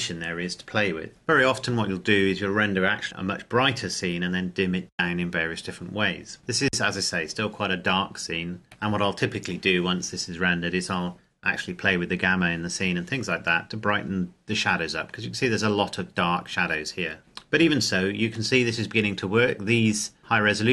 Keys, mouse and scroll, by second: 8.6 shift+middle click, 18.8-20.2 scroll down 1, 20.4-20.7 scroll up 1.